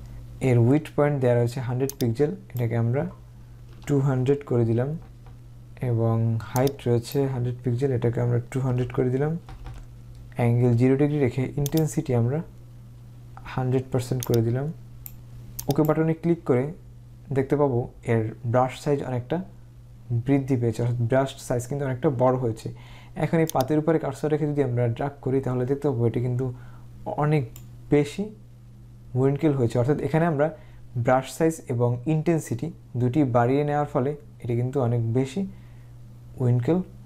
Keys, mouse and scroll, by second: 2.0 click, 3.8 2, 5.1 typing, 6.7 click, 8.8-9.6 typing, 11.9 click, 15.7 click, 23.6 click.